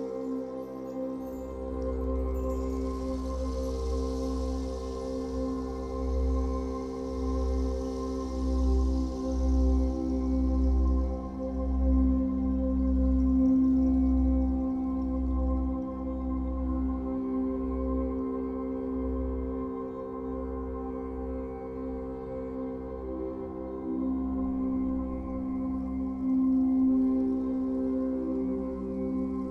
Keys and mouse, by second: 0.4 click, 0.8-2.0 drag, 2.0 space, 2.5-3.9 drag, 4.9 click, 8.8-11.7 drag, 11.8 click, 14.3 Delete, 17.5 click, 18.8 click, 19.1 click, 20.6 click, 21.4 click, 22.6 click, 23.8 click, 24.4 click, 25.2 4, 25.7 Return, 27.0-29.5 drag.